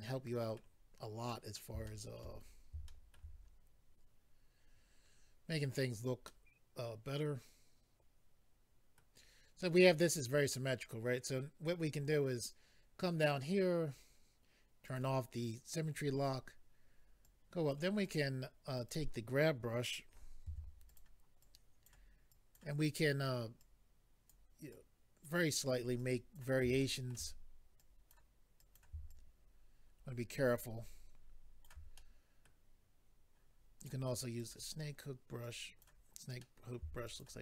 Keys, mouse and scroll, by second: 0.7-1.3 scroll down 2, 1.3 middle click, 1.8 shift+middle click, 2.2 middle click, 2.3-2.8 scroll down 3, 2.8 shift+middle click, 3.3 scroll up 3, 6.2 middle click, 11.8-12.5 scroll down 2, 12.7-13.0 scroll down 2, 13.9-14.3 scroll down 1, 14.8 click, 14.8 scroll down 1, 17.2 click, 18.0 click, 18.1 click, 18.8 click, 18.9 click, 20.9 click, 20.9 f, 21.0 click, 21.4 click, 22.3 click, 23.6 click, 24.7 click, 26.0 click, 26.8 shift+middle click, 27.8 click, 28.6 click, 28.8 click, 29.1 shift+click, 31.9 middle click, 33.8 click, 33.9 click, 34.4 click, 34.5 click, 34.8-35.4 scroll up 1, 35.4 click, 36.4 middle click, 37.0 shift+click.